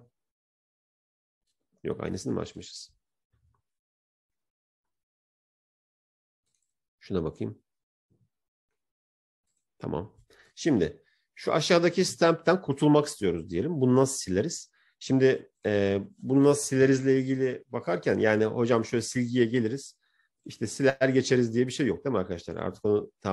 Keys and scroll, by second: 17.3 ctrl+j.